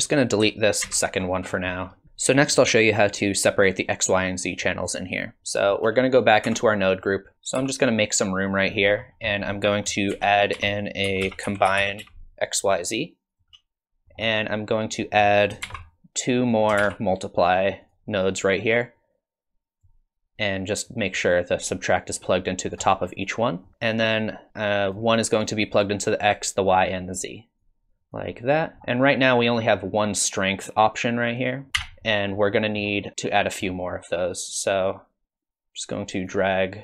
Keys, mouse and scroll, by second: 0.9 ctrl+x, 1.4-2.0 scroll down 7, 4.5 click, 6.4 Tab, 7.6 g, 9.0-9.5 scroll up 3, 9.5 click, 10.1 shift+a, 14.0 middle click, 14.8 click, 15.7 shift+d, 16.8 shift+d, 19.0 click, 20.9 click, 23.9 click, 27.6 click, 28.8 middle click, 28.8-30.2 scroll down 3, 31.8 n, 32.5 middle click, 33.1 scroll up 1, 33.7 middle click, 34.8 click.